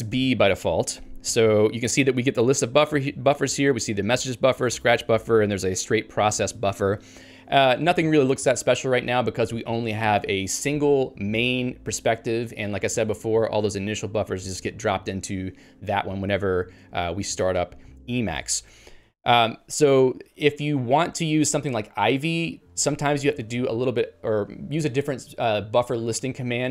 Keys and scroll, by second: 0.1 Return, 17.5 ctrl+g.